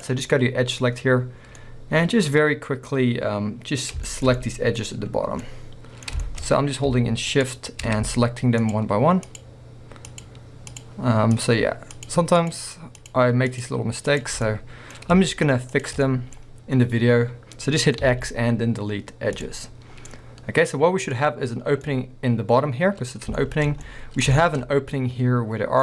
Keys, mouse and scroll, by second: 0.0 click, 1.6 middle drag, 2.4-6.5 middle drag, 6.5 scroll up 1, 7.4 shift+click, 8.6 shift+click, 9.3 shift+click, 10.1 shift+click, 10.7 shift+click, 11.3 shift+click, 12.0 shift+click, 12.4 shift+click, 13.0 shift+click, 13.5 shift+click, 14.1 shift+click, 14.5-15.7 middle drag, 15.7 shift+click, 16.1-24.4 middle drag, 18.1 x, 20.0 scroll down 1, 24.7 scroll up 1.